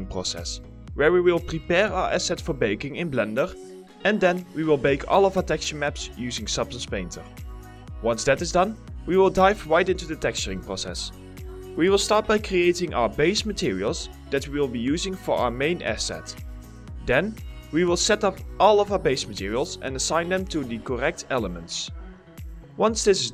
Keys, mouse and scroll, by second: 0.8 scroll up 1, 1.2 alt+middle click, 1.5 middle click, 1.8 alt+middle click, 7.4-9.2 typing, 9.5 alt+middle click, 18.9 right click, 22.5 double click, 22.6-23.3 typing.